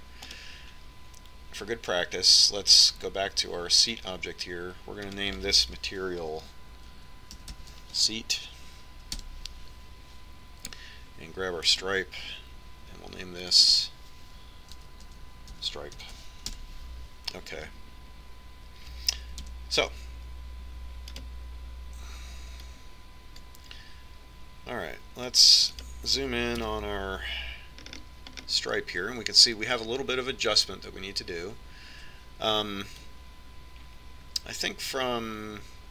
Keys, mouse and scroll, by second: 2.0-3.8 right drag, 6.8-8.6 drag, 13.5-15.4 right drag, 15.2-17.0 drag, 21.3 KP_3, 22.9-24.9 right drag, 24.5-26.1 drag, 27.6 right click, 28.4 KP_Decimal, 30.2-32.2 middle drag, 34.9-35.9 drag.